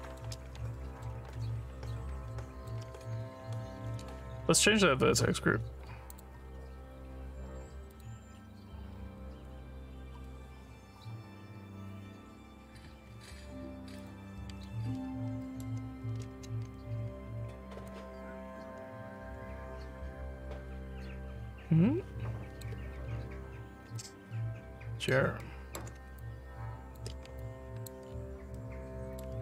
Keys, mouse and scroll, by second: 0.8 alt+middle click, 1.4-2.7 alt+drag, 6.2 click, 8.0 click, 9.3 Tab, 14.0 click, 18.0-22.6 shift+drag, 24.0-25.2 alt+drag, 25.5 alt+middle click, 26.2 ctrl+click, 27.5 alt+click, 28.1-28.7 alt+scroll down 2, 28.7 alt+middle click.